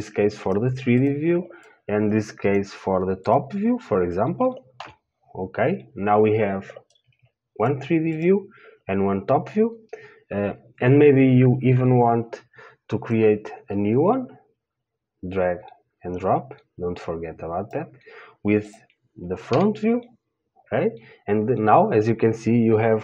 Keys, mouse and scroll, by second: 5.1 KP_7, 20.0-23.0 drag, 20.0 KP_3.